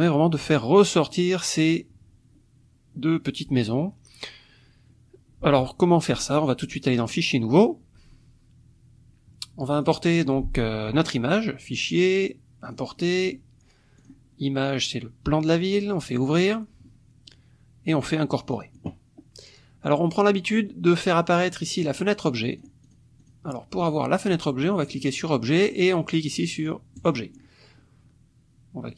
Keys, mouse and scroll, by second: 7.1 click, 7.5 click, 9.8 click, 12.7 click, 14.0 click, 16.0 click, 18.5 click, 22.5 click, 22.8 click, 23.2 click, 24.9 click, 27.0 click.